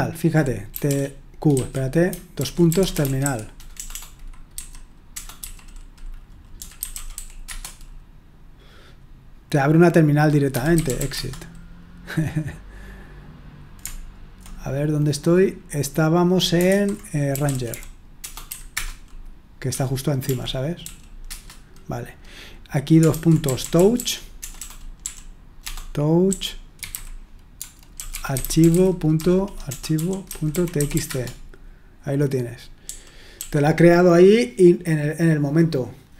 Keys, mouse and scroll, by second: 0.0-7.6 typing, 10.3-11.5 typing, 16.7-21.3 typing, 23.2-31.4 typing, 32.8-33.3 typing.